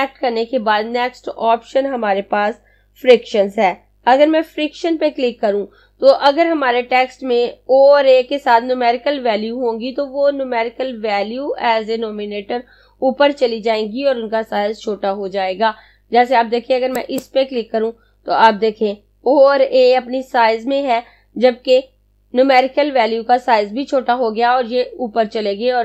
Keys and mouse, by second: 16.5 click.